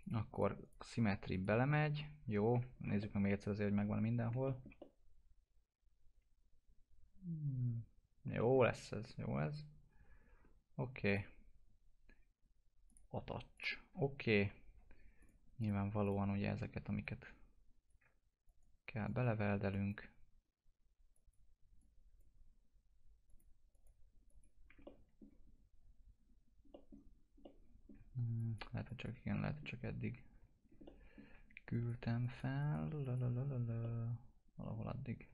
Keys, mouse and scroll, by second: 0.6 right click, 1.3 click, 2.5 F4, 2.7 scroll down 1, 3.5 alt+middle click, 4.7-8.3 alt+middle drag, 8.3 middle click, 8.7-10.7 scroll up 1, 10.7 scroll up 1, 11.0 click, 14.3 F4, 15.2 click, 17.0-18.4 drag, 24.8 middle click, 25.5 scroll up 1, 26.7 middle click, 28.3 ctrl+click, 29.3 middle click, 30.6 scroll down 1, 30.8 alt+middle click, 31.7 ctrl+click, 33.8-35.3 middle drag.